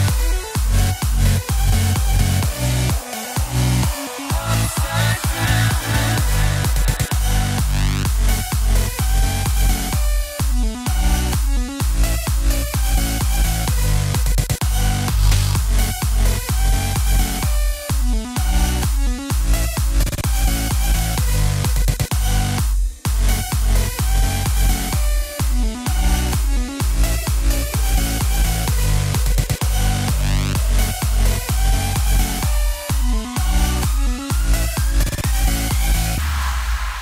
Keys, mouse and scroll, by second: 7.4 click, 7.8-8.9 middle drag, 8.9 KP_7, 9.6 scroll down 3, 10.0 shift+a, 17.2-20.8 drag, 22.5-23.3 shift+middle drag, 23.3 z, 24.3 click, 25.5 Tab, 26.5 click, 28.8 b, 32.2 x, 32.7 Tab, 34.0 click, 35.2 s.